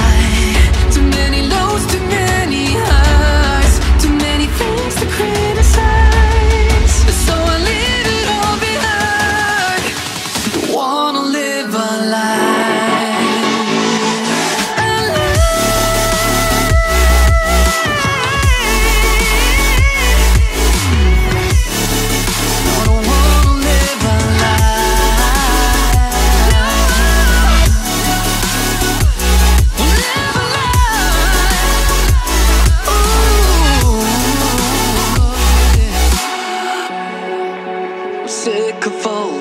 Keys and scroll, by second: 8.5 ctrl+z, 14.3 ctrl+g.